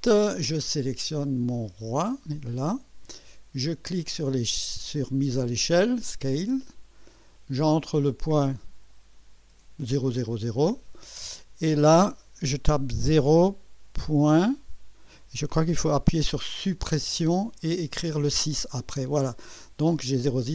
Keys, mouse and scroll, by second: 1.5 click, 2.0 click, 6.6 click, 10.6 click, 13.0 0, 14.2 ., 17.0 Delete, 17.9 6.